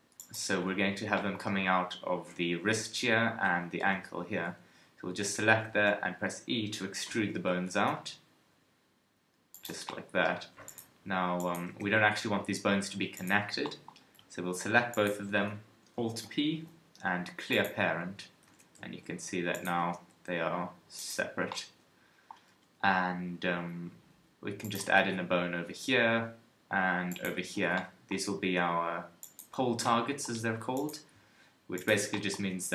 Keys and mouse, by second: 3.8 KP_3, 5.7 e, 9.6 click, 10.7-11.7 middle drag, 11.7 g, 16.0 right click, 16.2 alt+p, 18.5 g, 19.8 g, 21.1-22.5 drag, 22.5 KP_3, 24.9 shift+a, 27.4 shift+a, 28.2 KP_1, 32.4 KP_1.